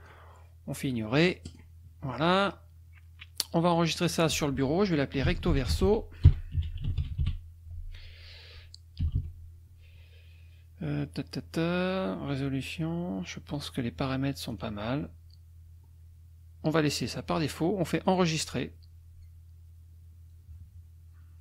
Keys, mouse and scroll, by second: 1.4 click, 3.7 click, 4.9-7.7 typing, 9.0 Delete, 13.5 click, 14.5 click, 18.1 click.